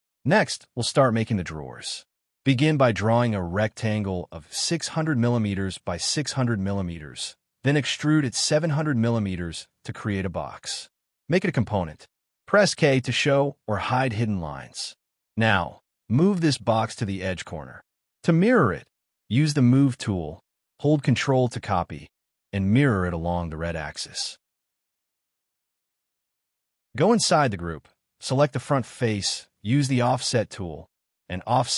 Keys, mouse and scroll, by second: 0.0 middle click, 1.0 scroll up 1, 1.6 scroll down 1, 1.8 shift+middle click, 2.3 scroll up 1, 3.3 scroll up 1, 3.5 middle click, 4.3 scroll up 1, 4.5-9.6 typing, 7.2 Return, 10.3 double click, 10.7 right click, 13.5 middle click, 14.4 k, 14.6 scroll up 1, 15.0 m, 15.6-16.5 scroll up 1, 16.6 shift+middle click, 17.1-17.6 scroll up 1, 18.7 scroll down 1, 19.2 k, 19.5 middle click, 19.6 scroll down 1, 24.0 space, 24.4 scroll down 1, 25.2 middle click, 26.7 scroll up 1, 27.0 middle click, 27.2 scroll up 1, 27.7 double click, 27.9 scroll up 1, 28.3-30.4 typing.